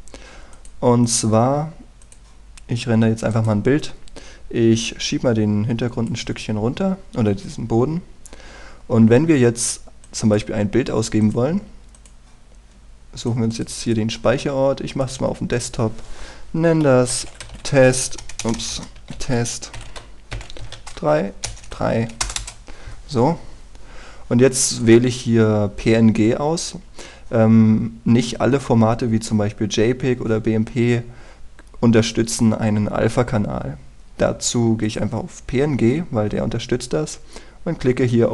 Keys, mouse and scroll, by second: 4.0-5.0 right drag, 5.5-11.9 drag, 17.6-19.7 typing, 21.3-22.1 typing, 22.9 Return, 25.3-38.3 drag.